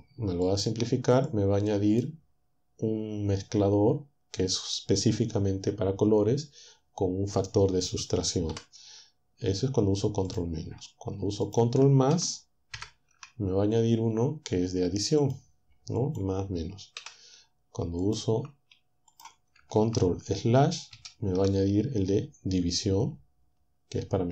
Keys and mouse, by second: 0.5 click, 1.3 click, 8.5 Delete, 11.4 shift+click, 12.8 ctrl++, 15.4 click, 17.0 Delete, 18.0 click, 21.0 ctrl+/.